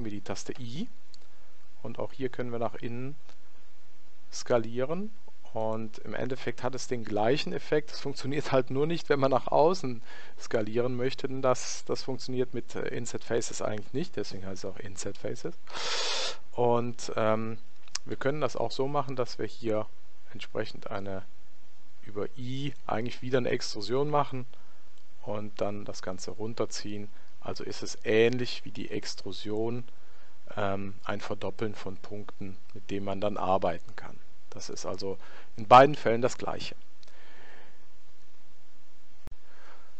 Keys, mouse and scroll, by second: 0.5 i, 6.4-8.2 middle drag, 18.1 i, 24.9 click, 29.0-30.7 middle drag, 31.5-33.2 middle drag.